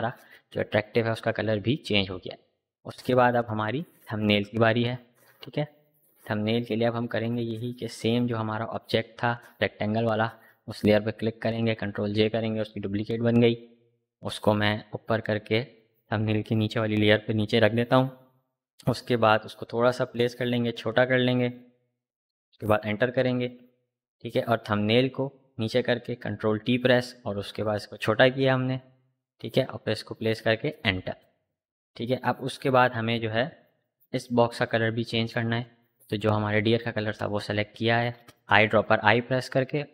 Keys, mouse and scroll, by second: 8.6 click, 11.2 ctrl+j, 14.1-18.8 drag, 20.1-23.2 alt+drag, 24.0-25.7 shift+drag, 25.7 shift+t, 26.9-29.9 alt+drag, 29.9 Up, 32.9 click, 35.3 l, 36.2 click.